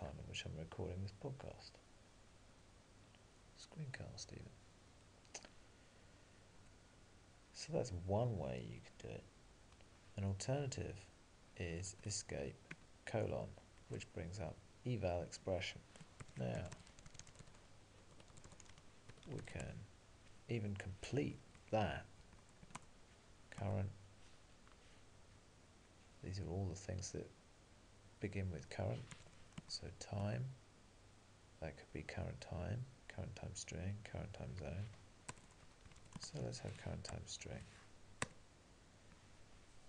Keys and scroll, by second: 12.8 ctrl+e, 12.8 alt+:.